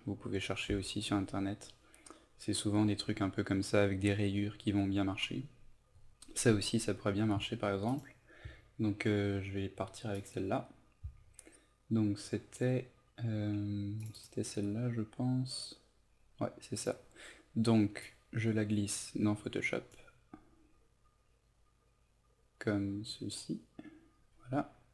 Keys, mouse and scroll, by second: 0.6 Right, 1.0 typing, 2.7 Right, 7.8 click, 10.4-24.9 drag.